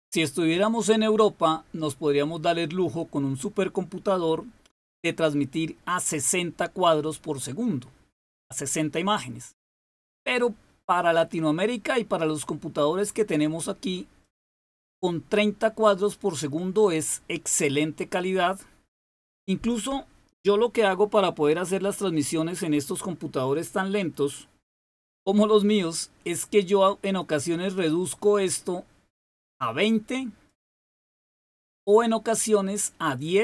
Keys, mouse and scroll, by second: 4.8 click, 10.1 click, 14.1 click, 27.0 click, 30.4 click, 31.5 click, 33.1 click.